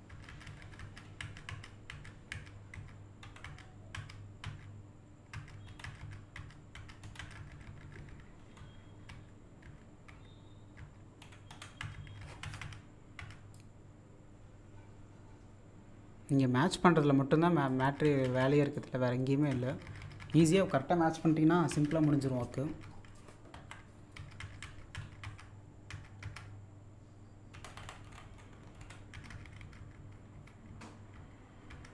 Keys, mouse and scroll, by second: 1.5-5.8 typing, 7.0 Down, 11.5 Right, 13.6-17.8 drag, 18.7 click, 23.5 z, 27.9 Right, 28.1 Up, 28.2 Right, 28.5 Up, 28.8 Right.